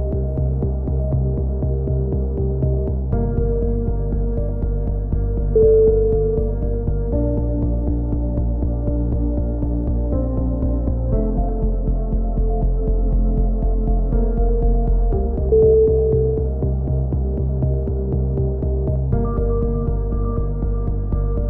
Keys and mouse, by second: 1.0 click, 1.5 right click, 4.0 click, 5.3-6.6 drag, 5.3 right click, 6.7 a, 6.8 click, 7.3 right click, 7.9 KP_7, 8.5 KP_3, 8.7 z, 11.7 KP_7, 12.0 click, 12.4 z, 12.6 click, 13.6 KP_7, 13.8 z, 14.1 e, 14.4 click, 16.6 c, 16.9 right click, 17.1 click, 17.6 a, 17.7 z, 17.8-19.1 drag, 20.8 KP_7, 21.0 z, 21.1 click.